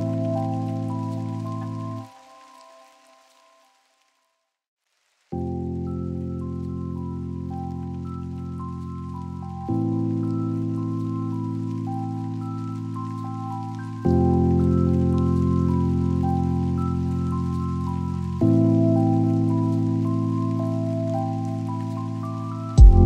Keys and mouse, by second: 1.6-6.2 drag, 6.8-9.8 drag, 21.9-23.0 drag.